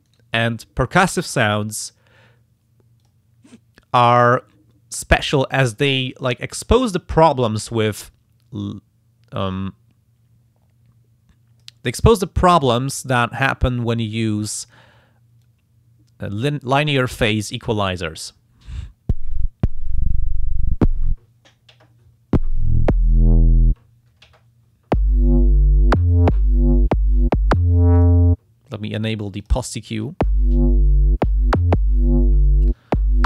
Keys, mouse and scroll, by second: 0.1 right click, 3.0 click, 4.2 click, 5.5 click, 8.0-11.8 drag, 12.4 click, 13.0 click, 13.3 click, 15.6-18.2 drag, 28.0 click, 29.4 click.